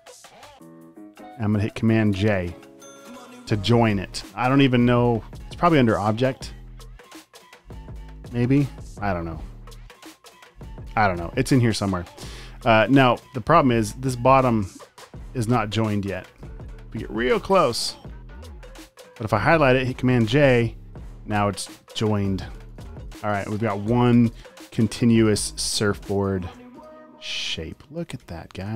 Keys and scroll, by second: 2.7 super+j, 14.8 space, 15.6 space, 15.8 space, 16.5 super+space, 20.3 super+j, 21.4 space, 21.9 alt+super+space, 23.9 v, 24.1 space, 25.8 space, 26.4 alt+super+space, 26.6 v, 28.0 super+z, 28.2 v.